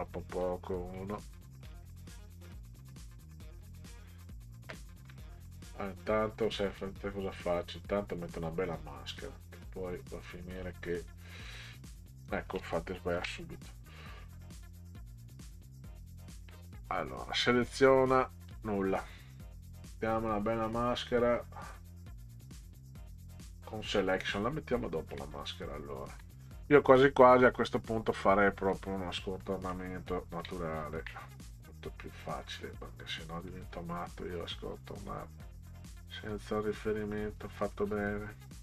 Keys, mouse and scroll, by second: 0.4 click, 1.6 shift+click, 4.6 shift+click, 6.8 click, 7.6 click, 9.2 click, 10.6 click, 13.2 ctrl+z, 14.9 click, 17.4 click, 18.5 click, 19.7 click, 24.2 click, 25.4 ctrl+scroll up 2, 28.7 click, 29.4 middle click, 30.7 ctrl+scroll up 2, 33.5 click, 37.6 ctrl+click.